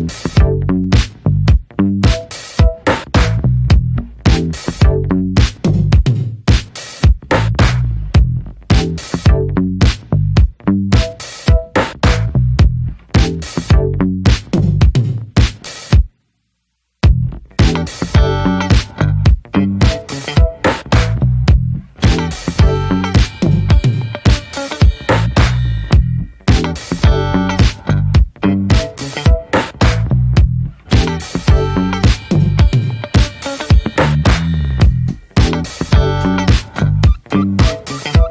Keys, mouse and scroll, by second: 0.0-2.5 drag, 2.6-4.6 drag, 4.6 ctrl+s, 5.5 click, 6.4-7.7 scroll down 4, 7.7-9.0 drag, 9.0 ctrl+z, 9.3-10.5 drag, 10.5 ctrl+z, 10.9-11.9 drag, 11.9 ctrl+z, 12.2 click, 13.0 scroll down 2, 13.1 middle click, 13.6 alt+scroll up 1, 13.6 alt+scroll down 1, 14.0 alt+middle click, 14.2-14.9 scroll up 4, 14.5 shift+middle click, 15.1-16.1 scroll up 1, 16.1 click, 16.4-17.9 scroll up 1, 17.9 click, 19.5 click, 20.9 click, 21.6-22.9 shift+middle drag, 22.9-24.9 drag, 24.9 ctrl+z, 26.0-27.6 drag, 27.6 ctrl+z, 28.6-29.7 drag, 29.7 ctrl+z, 29.9-32.6 drag, 32.7-34.4 shift+middle drag, 34.4 click, 34.8-36.5 shift+middle drag, 36.5 click, 36.9 ctrl+z.